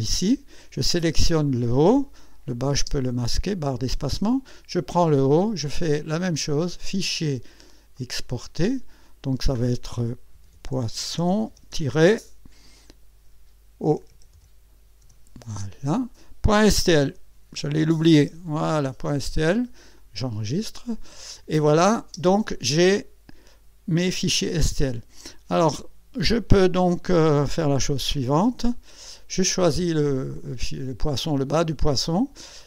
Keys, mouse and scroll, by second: 2.8 space, 4.3 click, 6.7 click, 7.9 click, 9.0 click, 10.1-12.2 typing, 13.6-15.0 typing, 16.8-18.7 typing, 20.0 click, 22.0 space, 29.0 click.